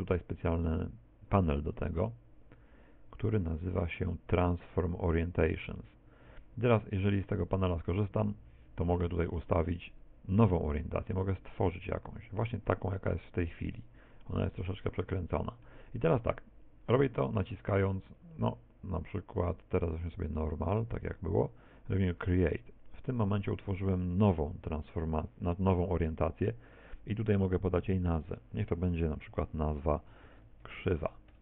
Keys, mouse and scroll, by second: 1.8 click, 4.3 click, 7.5 click, 9.9 click, 14.3 middle click, 18.1 click, 22.2 click, 25.9 t, 27.9 click.